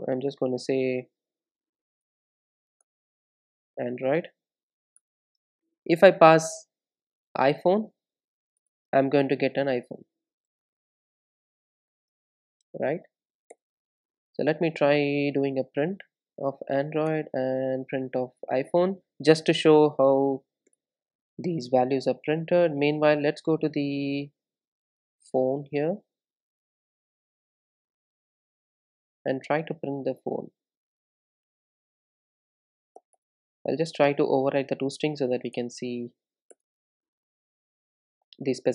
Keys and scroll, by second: 2.1 alt+Return, 6.4 super+d, 8.6 super+d, 10.0 Return, 14.6 Tab, 17.1 Tab, 17.7 Return, 20.7 super+d, 22.0 Return, 22.4 super+s, 27.6 super+z, 29.1 super+z, 34.2 super+n.